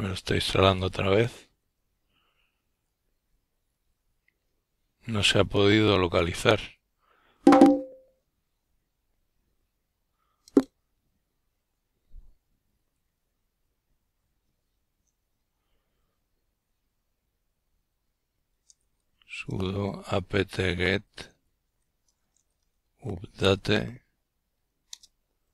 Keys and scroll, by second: 6.7-13.0 typing, 13.3 Return.